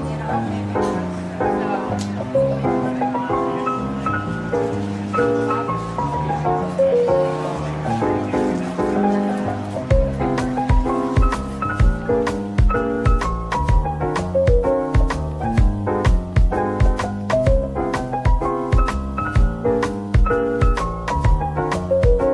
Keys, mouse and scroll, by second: 0.6 scroll down 1, 8.6 scroll down 1, 9.6 middle click, 10.7-11.0 scroll up 1, 11.5 double click, 13.3 scroll down 1, 14.5 middle click, 17.5 /, 19.3-20.4 typing, 20.1 scroll down 1, 21.2 shift+click.